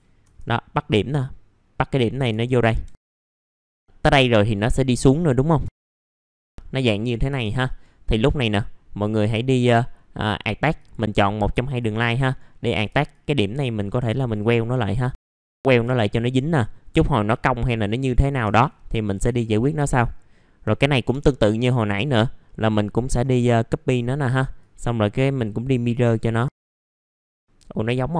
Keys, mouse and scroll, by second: 0.8 click, 2.3 s, 2.5 middle click, 2.8 F3, 3.0 middle click, 3.4 click, 3.7 Delete, 4.5-5.5 drag, 5.6 1, 5.7 click, 6.4 s, 6.5 middle click, 7.3 F3, 7.6 right click, 10.7 click, 12.2 right click, 13.1 click, 14.8 right click, 15.3 click, 15.5 scroll up 1, 15.7 scroll down 1, 16.2 right click, 17.3 click, 18.1 middle click, 18.4 F3, 19.3 shift+click, 21.7 middle click, 24.6 click, 27.2 scroll down 1.